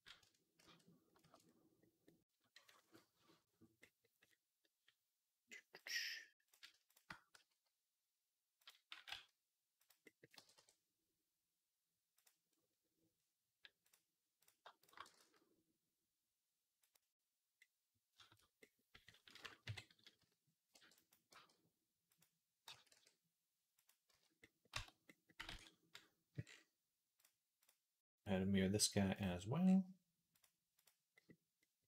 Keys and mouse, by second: 0.5 ctrl+z, 1.2 ctrl+z, 8.5 f, 8.8 g, 10.2 g, 13.7 click, 14.9 g, 18.4-19.5 drag, 19.5 KP_3, 20.0-22.5 drag, 20.0 z, 20.6 b, 21.1 g, 22.5-23.6 right drag, 22.5 a, 22.8 r, 23.6 click, 23.9 z, 24.2-31.5 right drag, 24.6 Tab, 25.4 ctrl+s, 27.1-31.5 drag, 27.1-31.5 middle drag, 31.8 click, 31.8 middle click, 31.8 right click.